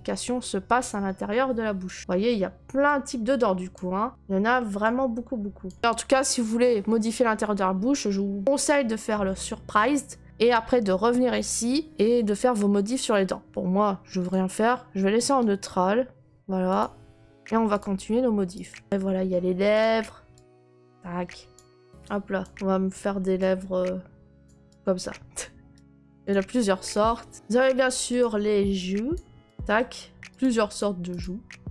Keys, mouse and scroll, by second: 1.1 middle click, 2.0 click, 2.0 middle click, 2.1 middle click, 3.7 click, 3.9 middle click, 4.1 click, 4.1 middle click, 5.6 click, 5.8 middle click, 11.9 click, 15.6 right click, 16.7 click, 17.8 click, 18.6 click, 18.9 click, 19.8 click, 21.5 click, 22.4 click, 24.4 click, 24.7 click, 25.8 click, 26.3 click, 26.9 click, 27.3 click, 28.2 click, 29.1 click, 29.6 click, 29.7 right click, 30.4 click, 30.7 click, 31.2 click.